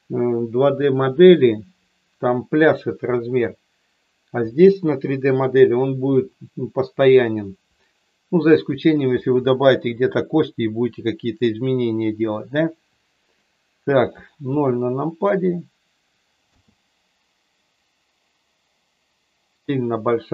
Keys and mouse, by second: 14.4 KP_0, 16.4 space.